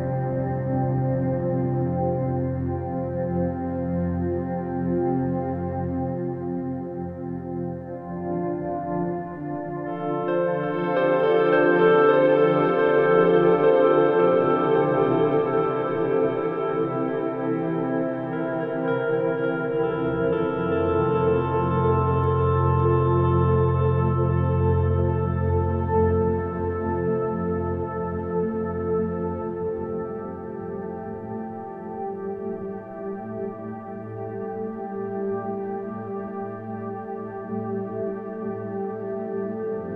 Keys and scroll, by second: 1.8 space, 8.0 space, 16.0 space, 20.2 space, 23.8 space, 30.1 space, 32.7 space, 35.9 space.